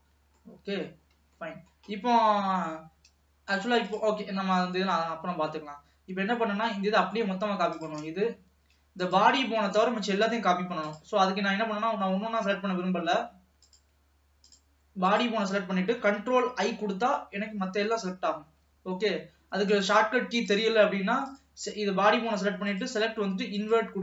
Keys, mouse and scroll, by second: 0.2-0.9 scroll up 2, 0.9 middle click, 1.4-1.8 scroll down 1, 1.8 middle click, 2.3-3.9 scroll up 2, 3.9 click, 4.6 ctrl+s, 4.9 scroll down 1, 5.1-7.8 middle drag, 7.8 click, 9.2 click, 11.0 click, 15.2 click, 16.7 ctrl+i, 19.8 click, 20.5 click, 21.4-24.0 drag.